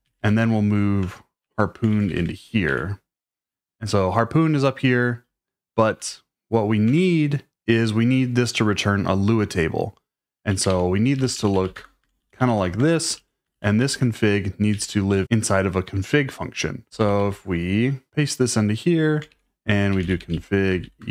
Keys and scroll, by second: 0.0-2.7 typing, 1.0 Return, 6.8 Return, 10.4-13.5 typing, 12.8 Escape, 14.7 shift+d, 15.1 shift+k, 16.6-21.1 typing, 18.1 Escape.